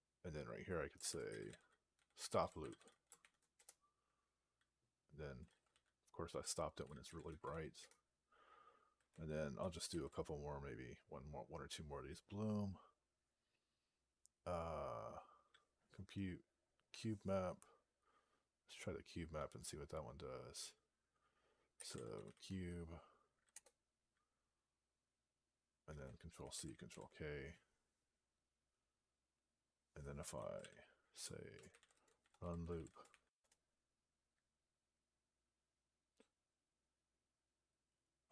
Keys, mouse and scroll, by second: 7.7 Return, 9.7 ctrl+f, 21.4-22.6 typing, 23.6 Return, 26.8 ctrl+k, 31.1-33.4 typing.